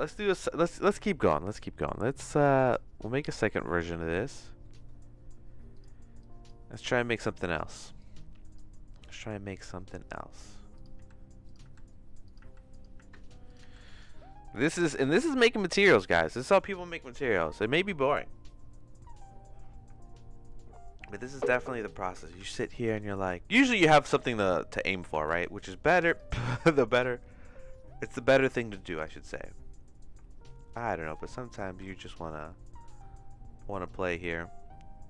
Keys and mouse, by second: 2.7 click, 3.9 middle click, 4.7 middle click, 5.7 click, 6.2 click, 6.9 click, 8.0 click, 10.7 click, 11.0-13.6 typing, 11.4 click, 12.2 click, 12.7 click, 13.5 click, 22.5 ctrl+z, 23.0 ctrl+z, 24.0 click, 24.2 x, 24.9 middle click, 25.2 shift+a, 30.0 click, 30.9 middle click, 31.5 click.